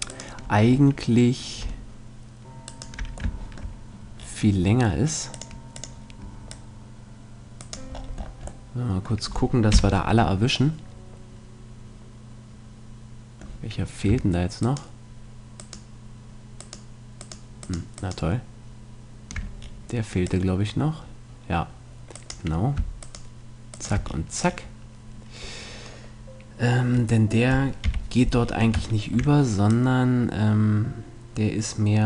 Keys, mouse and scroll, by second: 0.1 middle click, 0.8-1.9 right drag, 1.9 middle click, 2.7-4.0 right drag, 3.3 middle click, 5.3-8.3 drag, 9.7 KP_Decimal, 14.6-19.8 right drag, 19.7 middle click, 20.3-22.1 drag, 23.0-25.3 right drag, 27.9 KP_3, 28.5-29.7 middle drag, 29.7-31.7 drag.